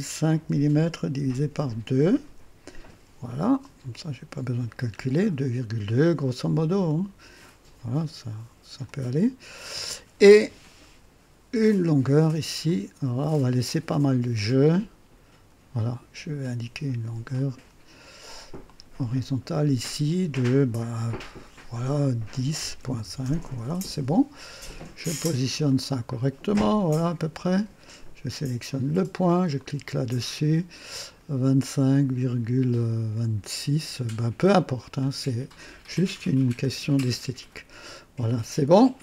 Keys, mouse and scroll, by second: 0.2 KP_5, 1.0 KP_Divide, 1.5 KP_2, 1.6 KP_2, 2.2 KP_Enter, 3.8-5.0 drag, 5.3-5.7 scroll up 1, 6.8-9.0 drag, 9.5-9.9 scroll up 1, 12.6-15.7 drag, 17.3 click, 18.6 click, 22.3 KP_1, 22.5 KP_0, 22.8 ., 23.0 KP_5, 23.2 Return, 25.6-27.7 drag, 28.6 click, 29.1 typing, 29.5 click, 34.7 click, 36.4-37.6 drag, 38.7 click.